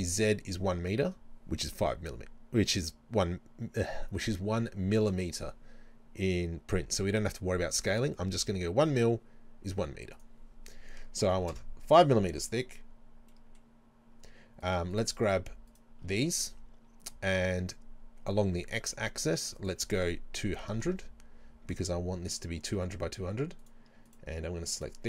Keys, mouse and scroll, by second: 10.2-13.3 drag, 11.6 KP_Enter, 12.4-13.3 scroll down 2, 13.3-14.6 middle drag, 14.6 right click, 14.9 shift+right click, 15.7 shift+right click, 19.6-21.7 drag, 20.7 KP_0, 21.7-23.6 middle drag, 23.6 right click, 24.1 shift+right click, 24.8 shift+right click.